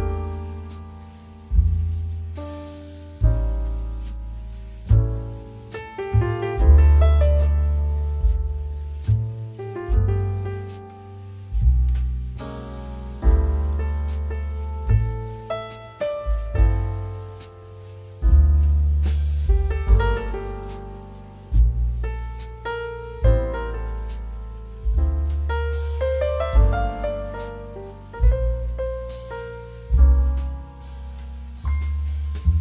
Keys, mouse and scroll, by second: 0.3 c, 2.4 alt+click, 6.4 space, 6.6 click, 6.9 space, 7.7 m, 8.0 click, 9.7 ctrl+t, 10.4 shift+click, 12.6 ctrl+d, 13.6 click, 15.8 ctrl+t, 16.7 shift+click, 20.0 ctrl+d, 20.6 z, 20.8 click, 21.5 space, 21.6 click, 22.0 space, 25.3 click, 28.9 click, 30.7 ctrl+t, 31.4 shift+click.